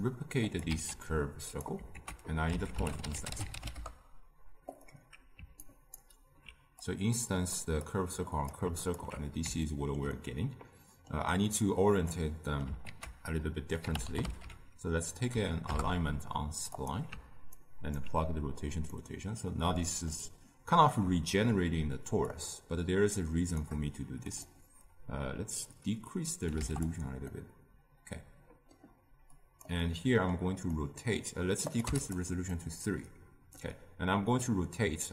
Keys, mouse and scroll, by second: 0.6 shift+d, 3.7 ctrl+a, 5.9-7.5 alt+right drag, 7.5-9.6 drag, 9.6-15.6 ctrl+middle drag, 15.6 ctrl+a, 17.9-18.9 alt+right drag, 18.9-22.3 middle drag, 22.3-26.8 shift+drag, 27.3-31.9 middle drag, 31.9-32.6 drag, 32.6-35.1 middle drag.